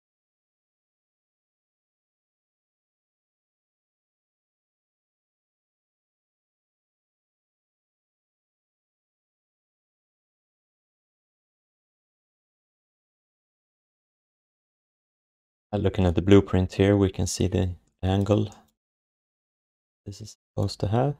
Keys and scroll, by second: 1.2 alt+shift+d, 1.6 3, 2.1 1, 9.7 r, 19.4 r.